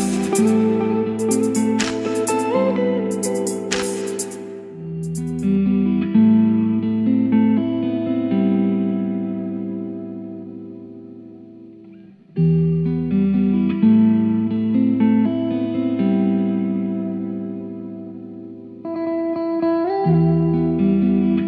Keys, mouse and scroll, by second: 1.7-3.4 drag, 3.4-8.8 drag, 8.8 right click, 9.2-21.4 drag.